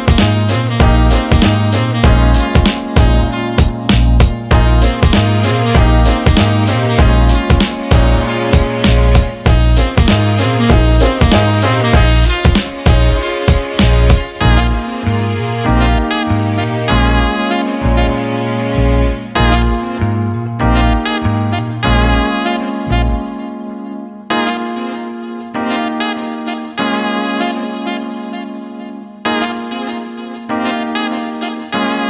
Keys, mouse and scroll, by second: 7.3 click, 8.9-11.7 drag, 13.7-15.0 alt+middle drag, 16.3 alt+shift+middle click, 16.9 click, 20.4 click, 24.8 alt+shift+middle drag, 29.4 click, 30.5 click.